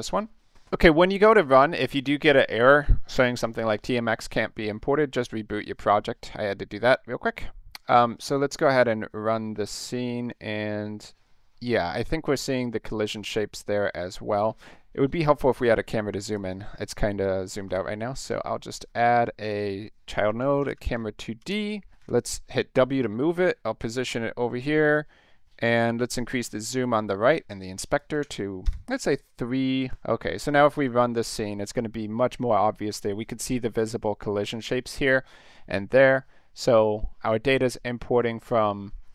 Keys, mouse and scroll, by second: 7.1 middle click, 7.5 scroll up 1, 8.1 click, 16.3 click, 17.7 click, 18.2 right click, 19.5 click, 19.9-22.0 typing, 23.0-24.9 drag, 27.9 click, 28.1 3, 28.6 Tab, 29.9 click, 30.8 click, 38.4 click.